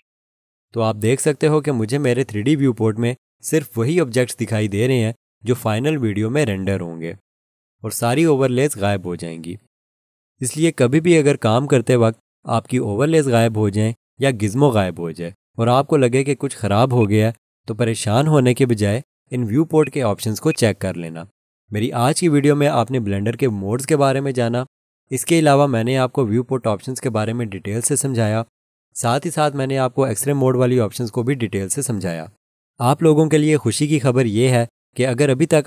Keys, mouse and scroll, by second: 17.0 click.